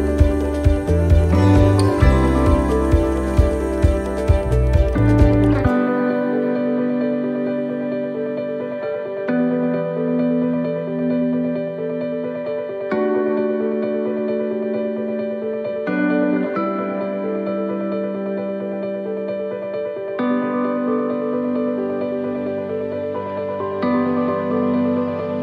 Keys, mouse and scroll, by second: 1.8 click, 2.6 middle click, 3.6-4.2 scroll down 5, 4.1 middle click, 4.7 scroll down 1, 5.0 middle click, 6.3 scroll down 1, 6.9 middle click, 8.1 shift+middle click, 9.2 middle click, 10.6 shift+middle click, 11.7-12.2 scroll up 4, 12.2 shift+middle click, 15.6-16.1 scroll up 4, 16.3 shift+middle click, 17.3 right click, 18.5 alt+shift+right click, 19.3 alt+shift+right click, 22.1 alt+shift+right click, 22.6 middle click, 24.4 click.